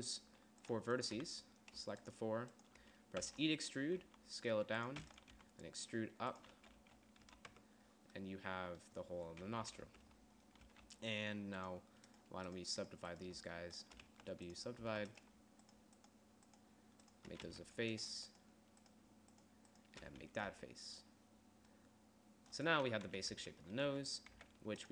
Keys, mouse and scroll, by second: 0.1 Tab, 3.8 e, 4.6 s, 5.6 e, 5.9 g, 7.0 z, 7.3 z, 7.8 z, 8.1 Tab, 10.1 KP_1, 10.4 Tab, 11.2 a, 14.6 w, 15.1 w, 15.4 a, 18.0 f, 20.6 f, 21.1 Tab, 23.6-24.9 typing, 23.9 Tab.